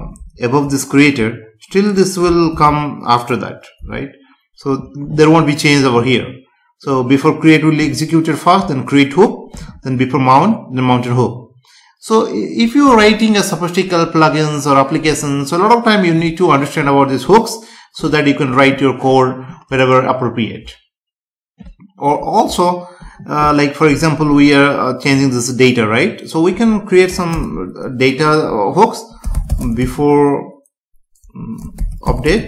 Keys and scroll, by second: 2.5 ctrl+s, 3.8 F5, 27.3 Return.